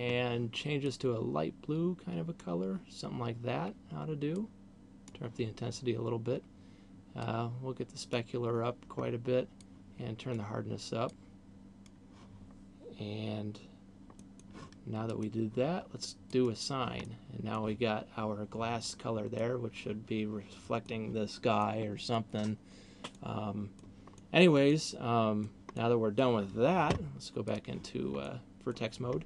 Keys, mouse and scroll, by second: 4.5 click, 6.0-6.5 scroll down 3, 7.5 click, 9.7 click, 11.0 click, 14.0 middle click, 15.0 click, 16.5 click, 17.0 middle click, 19.5 middle click, 21.7 middle click, 23.0 middle click, 24.0 middle click, 24.7 middle click, 25.7 middle click, 27.5 click, 28.5 middle click, 29.0-29.2 scroll down 2.